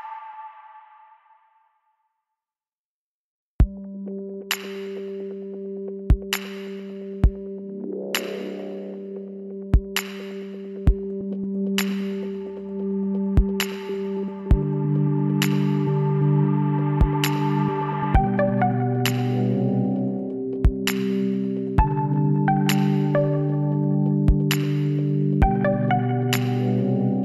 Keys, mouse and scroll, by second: 4.3-6.0 drag, 8.3-10.5 middle drag, 10.5-12.2 right drag, 12.6-16.4 middle drag, 16.4 shift+d, 18.9 e, 21.4 l, 23.5-25.3 drag, 26.2 middle click, 26.4 right click.